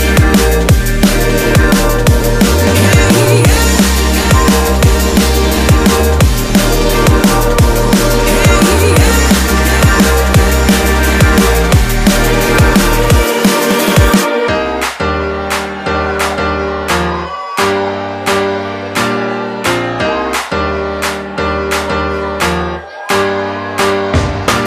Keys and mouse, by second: 3.7-5.1 ctrl+middle drag, 5.1 ctrl+r, 9.3-11.3 ctrl+middle drag, 11.3 click, 12.5 click, 12.7 click, 13.6 s, 17.0-21.7 middle drag, 21.7 ctrl+r.